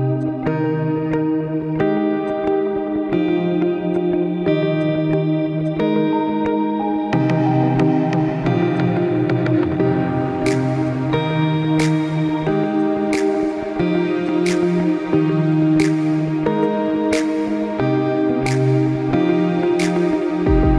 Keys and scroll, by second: 2.7-3.7 typing, 13.5 x, 18.0 x, 20.1 ctrl+-, 20.4 ctrl+-.